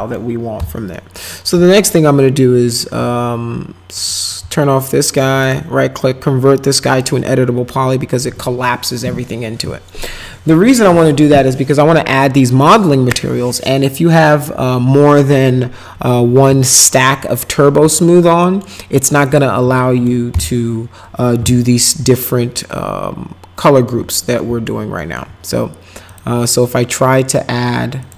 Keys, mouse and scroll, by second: 0.6 p, 0.9 middle click, 1.6-2.7 alt+middle drag, 3.9 click, 4.5 alt+middle click, 5.4 right click, 6.9 click, 16.5 ctrl+z, 17.9 alt+middle click, 19.3 click, 19.8 middle click, 20.3 m, 22.1-23.9 alt+middle drag, 24.4 alt+middle click, 25.0 alt+middle click, 26.1 click, 28.0 click.